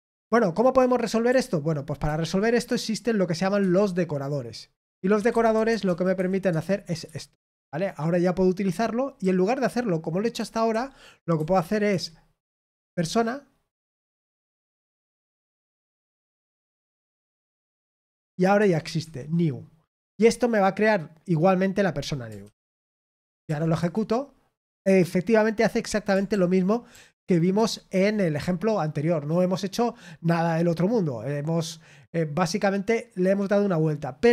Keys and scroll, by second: 6.1 typing, 6.4 Tab, 7.0 Escape, 11.8 typing, 16.4 typing, 18.9 Escape, 22.9 Return, 22.9 typing, 23.2 ctrl+p, 23.4 ctrl+p, 23.7 Return, 26.2 ctrl+p, 26.9 ctrl+p, 27.5 Return.